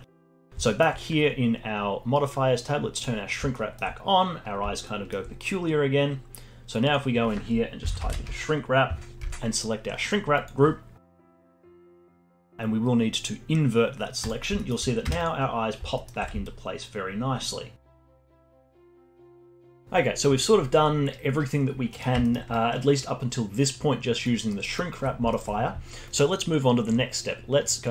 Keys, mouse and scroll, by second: 0.2 click, 0.6-3.0 alt+middle drag, 3.0 click, 3.5-5.7 alt+middle drag, 5.7-6.8 scroll down 2, 6.8-10.0 drag, 11.7-14.2 alt+middle drag, 14.2 click, 14.6 alt+middle click, 15.0 Tab, 15.5-16.0 scroll up 3, 16.0-16.4 alt+middle drag, 16.4-18.1 alt+right drag, 18.1-18.9 alt+middle drag, 18.9-19.7 alt+right drag, 19.7 alt+middle click, 21.9 middle click, 22.2 alt+middle click, 22.5-24.5 alt+drag, 24.5 alt+middle click, 24.8-25.3 alt+drag, 25.3-27.9 alt+middle drag.